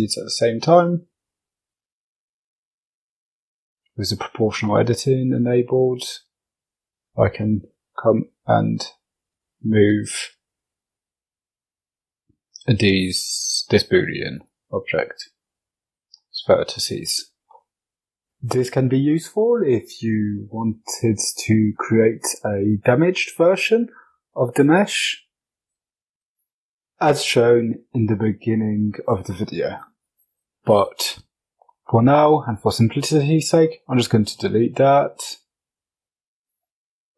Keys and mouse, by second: 0.8 g, 13.9 Tab, 15.1-15.4 middle drag, 17.1 F22, 31.7 x, 35.2 right click.